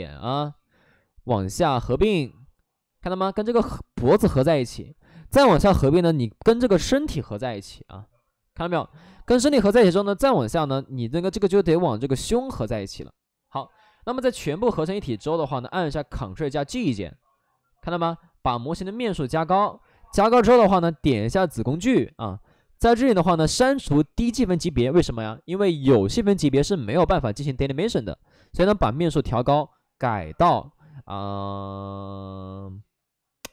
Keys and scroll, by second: 2.9 alt+s, 3.1 alt+s, 13.5 alt+s, 13.8 alt+s, 15.5 ctrl+d, 16.1 ctrl+d, 17.1 alt+s, 17.8 alt+s, 18.1 shift+f, 18.6 shift+f, 19.1 shift+f, 19.4 shift+f, 24.0 shift+f.